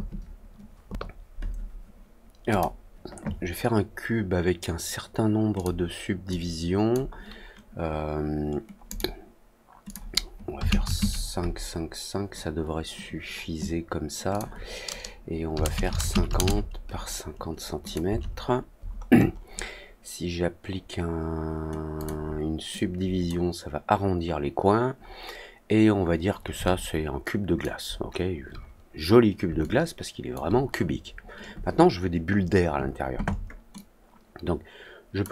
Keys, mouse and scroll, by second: 2.4 click, 5.5 click, 6.2 click, 8.8 click, 9.8 click, 14.2 click, 17.8 click, 18.7 middle click, 19.1 middle click, 21.9 click, 22.7 click, 24.9-25.3 scroll up 1, 25.9 scroll up 1, 26.6-27.5 alt+drag, 27.9 alt+middle click, 29.5 alt+click, 33.7-35.1 drag.